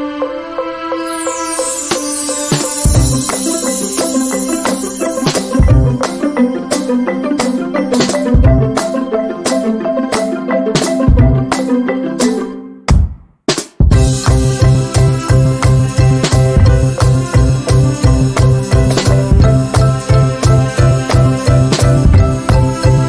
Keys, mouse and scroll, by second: 0.8 shift+scroll down 1, 2.4 z, 2.8 click, 5.1 F6, 6.0-8.6 drag, 10.3-12.9 right drag, 12.9 z, 13.3-15.6 drag.